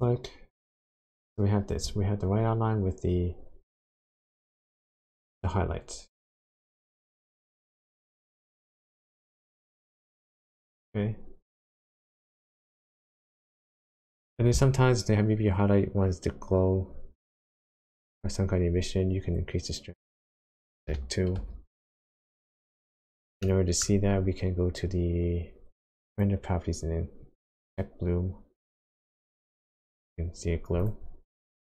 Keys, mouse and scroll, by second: 4.1 middle click, 5.2-6.1 scroll up 5, 7.1 shift+click, 11.1-11.8 scroll down 3, 11.8 shift+middle click, 12.5-13.0 scroll down 1, 13.3-13.7 scroll down 2, 13.8 shift+middle click, 16.6-17.1 scroll up 4, 17.1 middle click, 17.7-18.3 scroll up 1, 18.3-19.7 scroll up 3, 20.4 click, 23.4 middle click, 23.9-24.8 scroll up 3, 26.0 click, 27.6 click, 30.8 click, 31.1-31.6 scroll down 13.